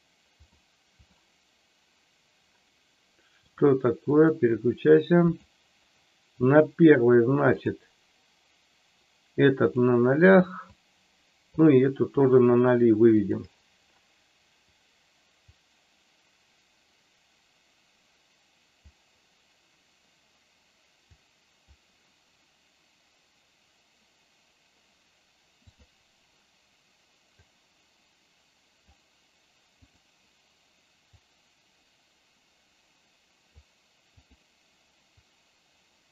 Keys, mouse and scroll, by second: 0.4 click, 3.4-4.4 drag, 5.4 click, 10.8 click, 13.1 click, 15.4-18.9 drag, 21.1 click, 27.4-28.9 drag, 29.8 click, 31.0-33.5 drag, 34.1 click, 35.3-36.1 drag.